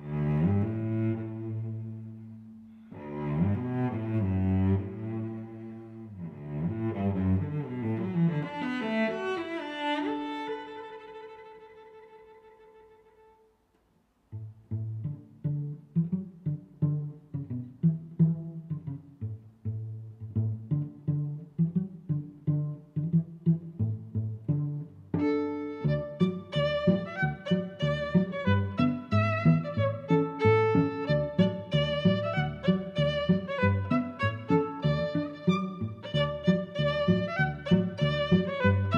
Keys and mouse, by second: 1.9 click, 2.8 click, 3.7 click, 4.3 g, 5.6 click, 6.1 click, 7.0 g, 7.4 y, 9.3 click, 10.3 click, 11.3 r, 12.4 click, 12.8 click, 13.5 g, 16.2 click, 16.7 click, 17.6 r, 19.1 click, 19.5 click, 21.1 g, 21.5 x, 23.7 click, 26.0 click, 26.5 right click, 26.9 click, 27.9 click, 28.9 s, 29.7 click, 29.9 g, 31.4 click, 31.9 s, 32.5 click, 33.5 middle click, 37.2 click.